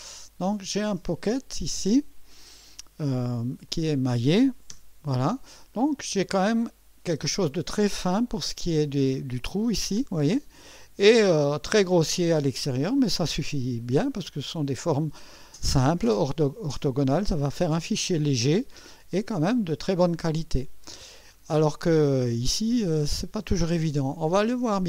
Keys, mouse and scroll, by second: 3.7 click, 5.7 click, 13.9-17.2 drag, 18.0-18.6 drag, 24.5 click.